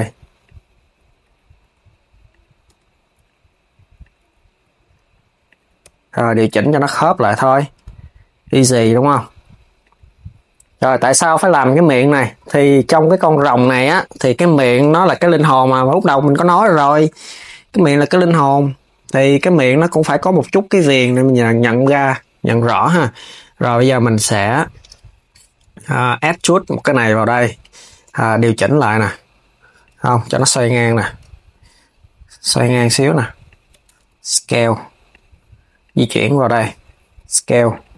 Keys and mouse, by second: 0.1 click, 1.3 r, 2.4 KP_3, 3.7 click, 4.3 s, 5.5 g, 6.9 click, 7.4 r, 11.1 click, 14.4 KP_7, 16.7 r, 21.1 KP_3, 25.9 e, 27.7 KP_7, 28.8 g, 35.5 click, 36.8 s.